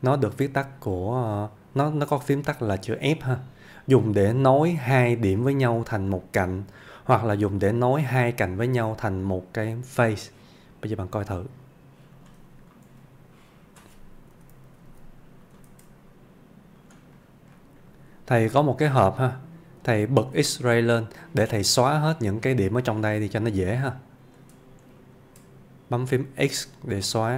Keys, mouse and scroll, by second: 4.5-7.0 ctrl+click, 11.2 ctrl+click, 12.6-12.9 ctrl+scroll down 2, 12.9 ctrl+Tab, 13.4-14.0 ctrl+click, 14.8 alt+z, 15.5 click, 16.8 click, 17.2-17.6 scroll up 1, 17.6 middle click, 17.8 scroll up 1, 18.5 Tab, 19.1-19.7 middle click, 20.2 alt+z, 21.8 middle click, 22.9-24.4 click, 24.9 shift+click, 26.5 x.